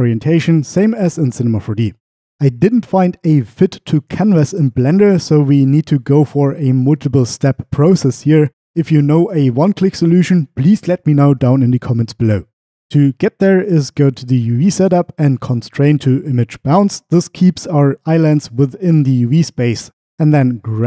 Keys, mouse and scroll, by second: 0.2 middle click, 14.0-16.3 drag.